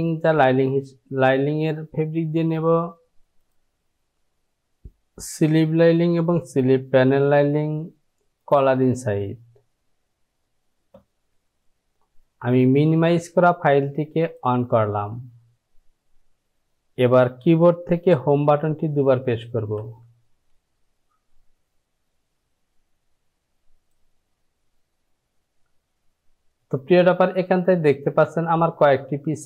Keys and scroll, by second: 19.7 Home, 19.8 Home.